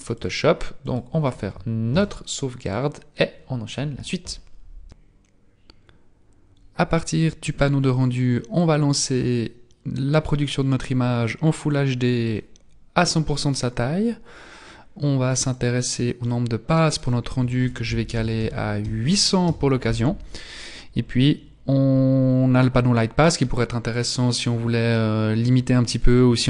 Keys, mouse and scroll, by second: 0.2 click, 2.0 ctrl+s, 8.6 click, 11.5 click, 15.6 click, 17.0 click, 21.0-24.0 scroll down 2, 24.0-24.3 scroll down 3, 25.5-26.4 scroll down 1.